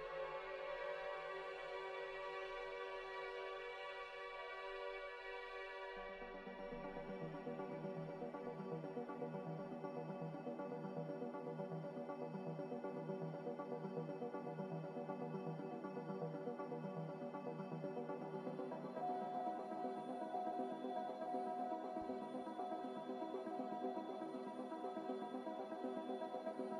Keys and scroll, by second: 0.2 x, 2.7 x, 4.0 n, 6.0 z, 7.2 n.